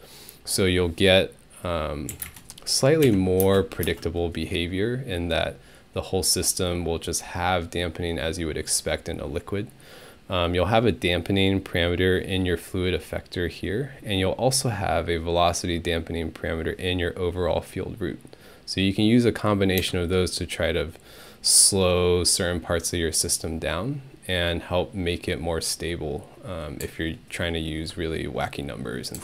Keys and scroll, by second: 2.1 3, 2.2 Return, 3.1 Home, 3.4 space, 3.8 space, 19.8 Home.